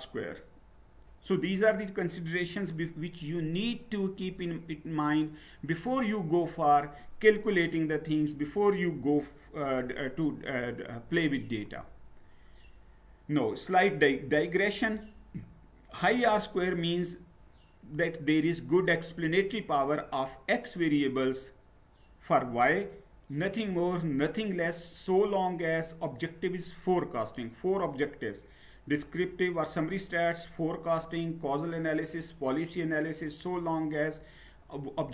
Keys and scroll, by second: 11.6 Down.